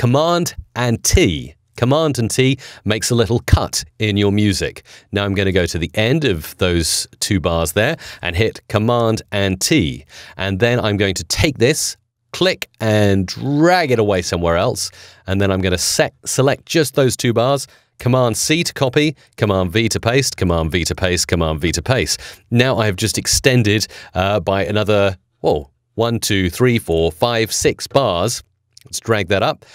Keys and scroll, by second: 1.0 super+t, 8.9 super+t, 18.3 super+c, 19.2 super+v.